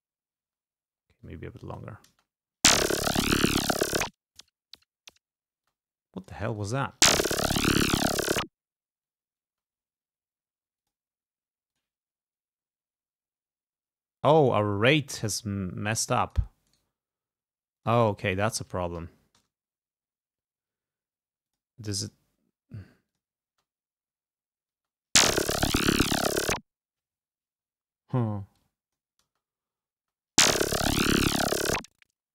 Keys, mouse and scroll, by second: 0.6 space, 1.3 click, 2.2 space, 5.7 click, 5.7 space, 6.8 space, 9.6 space, 10.9 click, 11.8 click, 14.4-16.7 drag, 16.8 right click, 17.9 click, 18.6 1, 19.2 0, 19.5 Return, 21.6 click, 22.1 click, 23.2 click, 23.6 space, 24.9 space, 27.5 space, 28.7 click, 29.4 space, 30.1 space.